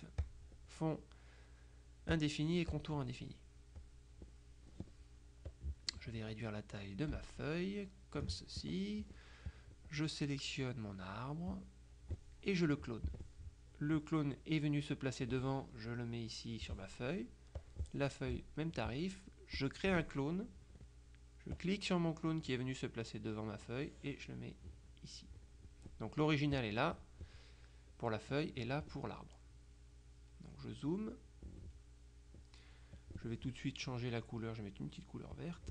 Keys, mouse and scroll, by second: 0.3 click, 2.2-3.4 drag, 3.9 click, 4.6 click, 7.1-8.8 ctrl+drag, 9.6 click, 11.6 click, 13.2 click, 14.1-17.3 drag, 17.7 click, 19.7 click, 21.6-26.0 drag, 26.7 click, 28.4 click, 29.8 middle click, 31.0-32.3 drag, 32.3 middle click, 32.6 click, 33.1 click, 35.4 click.